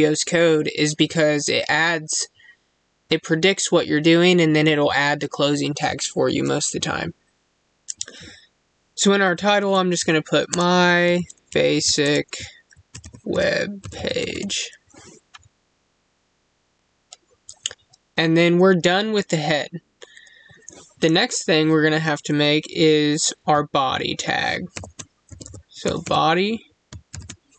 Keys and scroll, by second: 10.3 space, 11.9 space.